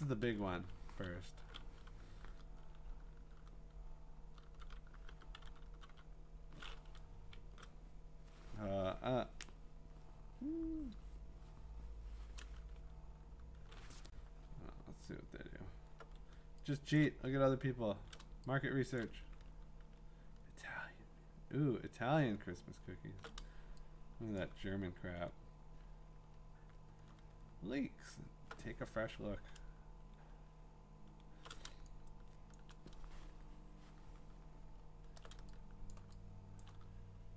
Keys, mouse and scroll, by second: 0.2 shift+Return, 4.2-6.4 typing, 9.9 Up, 14.6 scroll, 15.1 middle click, 15.1 scroll down 1, 15.2 scroll down 1, 15.2 scroll down 1, 15.2 scroll down 1, 15.5 scroll, 17.0 click, 17.5 scroll, 18.3-19.5 typing, 19.0 click, 19.3-21.1 alt+scroll, 21.2-23.0 scroll, 23.9-25.3 scroll, 24.4 click, 26.3-27.6 scroll, 29.5-30.3 ctrl+scroll, 32.2-32.7 scroll, 32.5 click, 35.0-35.5 scroll, 35.9 click, 36.6 click, 36.9-37.3 scroll.